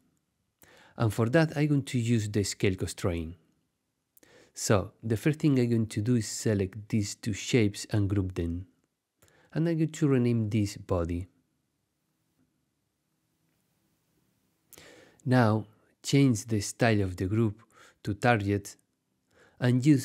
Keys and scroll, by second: 7.7 super+g, 10.8-12.4 typing, 12.6 Return.